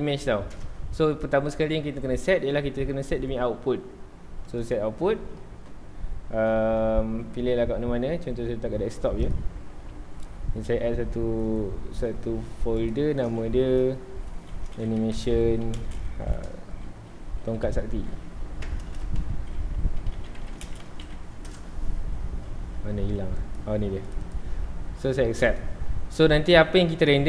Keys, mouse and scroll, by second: 4.4-7.5 drag, 12.0 click.